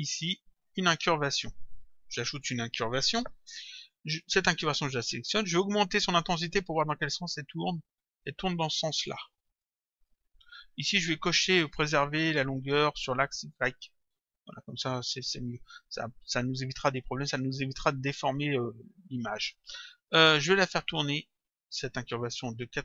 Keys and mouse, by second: 4.4 click, 7.1 click, 13.6 click, 20.5 click.